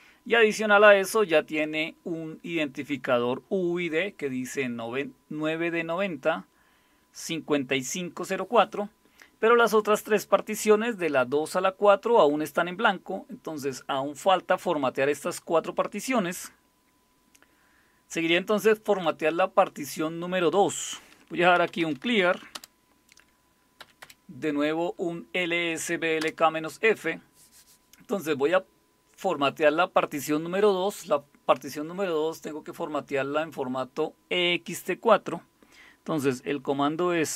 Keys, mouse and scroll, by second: 21.3-22.5 typing, 23.8 Up, 24.0 Up, 26.2 Return.